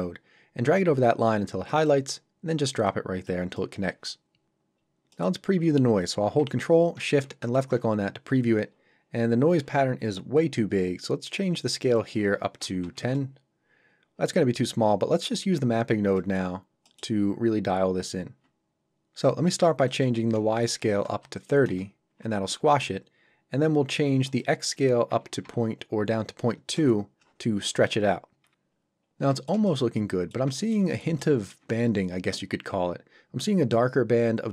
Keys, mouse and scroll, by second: 3.6 middle click, 4.8 scroll up 1, 5.1 middle click, 7.4 ctrl+shift+click, 11.8 click, 12.6 KP_1, 13.0 Return, 16.2 middle click, 16.6 scroll up 1, 16.9 middle click, 19.9 click, 20.8 KP_3, 21.6 Return, 24.3 click, 25.4 KP_2, 26.7 Return, 28.7-29.3 scroll down 1, 29.3 middle click, 29.7 shift+middle click, 30.0 middle click, 30.6 ctrl+middle click, 30.9 shift+middle click, 31.3 middle click.